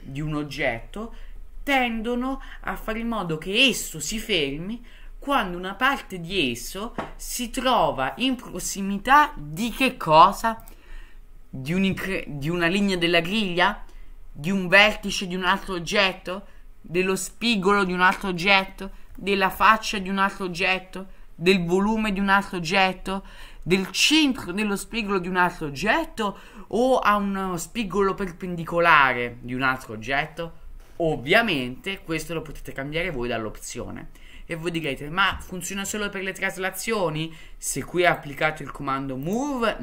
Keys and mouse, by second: 10.7-33.6 drag, 34.7-39.8 drag.